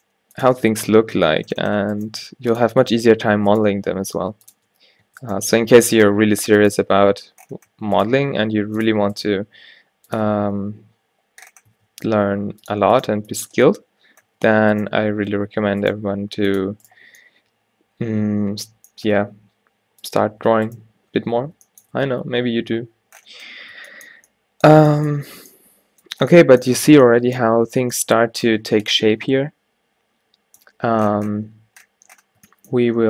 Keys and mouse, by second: 0.1 g, 0.6 Tab, 1.6 Tab, 2.2 g, 3.3 alt+w, 3.8 g, 4.6 Tab, 5.1 Tab, 6.2 g, 6.8 Tab, 7.8 Tab, 8.2 g, 9.3 g, 10.3 Tab, 11.8 Tab, 12.0 g, 13.0 click, 13.2 g, 13.5 Tab, 14.4 Tab, 15.1 g, 16.2 g, 19.3 g, 22.1 a, 22.2 a, 24.8 a, 29.4 middle click, 31.1 middle click, 31.4-33.0 middle drag.